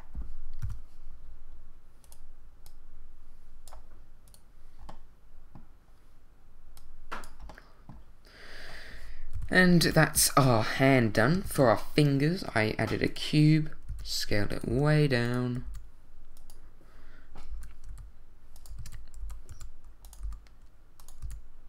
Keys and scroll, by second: 0.6 i, 9.8 a, 11.4 shift+a, 13.9 s, 14.7 g, 15.6 s, 17.5 r, 17.9 x, 18.7 super+x, 18.8 super+z, 19.2 super+r, 19.5 y, 20.2 g, 21.2 s.